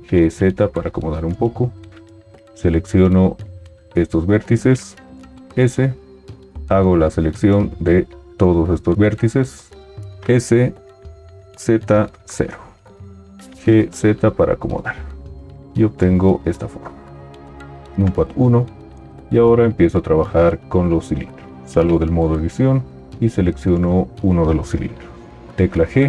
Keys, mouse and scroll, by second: 0.3 g, 5.4 s, 10.1 s, 13.8 g, 17.7 KP_1, 21.6 Tab, 25.6 g.